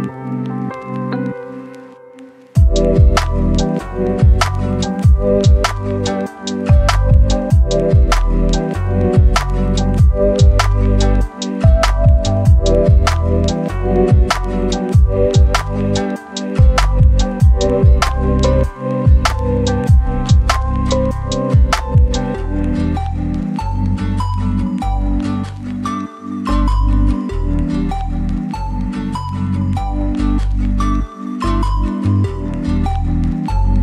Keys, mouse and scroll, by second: 0.0-0.8 scroll up 1, 0.8 click, 1.6 scroll down 1, 1.7 scroll up 1, 2.5 click, 4.4 scroll up 1, 4.8 click, 5.3-6.0 scroll up 1, 6.0 click, 6.4 scroll down 1, 6.5 scroll up 1, 7.6 click, 7.9 scroll down 1, 8.0 scroll up 1, 8.6 click, 8.8 scroll down 1, 9.1-9.7 scroll up 1, 9.7 click, 11.2-12.1 scroll up 1, 13.9 click, 14.1-14.6 scroll down 1, 14.6-15.2 scroll up 1, 15.2-22.3 right drag, 22.3-23.2 scroll up 2, 22.4 right click, 23.5 click, 23.7 right click, 24.1-24.5 scroll up 1, 24.5 click, 24.8 right click, 25.2 scroll up 1, 25.3 right click, 25.8-26.4 scroll up 1, 26.4 click, 28.1-31.1 scroll up 1, 31.1 click, 31.9 scroll down 1, 32.1 right click, 32.4-33.1 scroll up 1, 33.1 click.